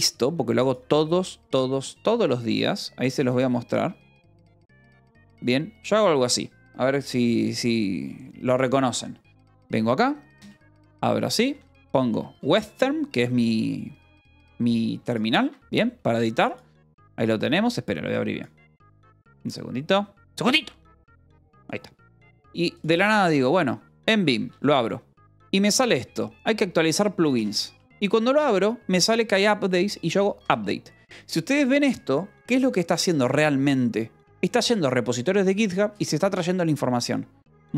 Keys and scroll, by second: 5.5 y, 11.3 w, 11.6 z, 12.0 Return, 15.3 Escape, 24.0 l, 24.4 Return, 27.3 space, 27.8 l, 30.9 shift+u.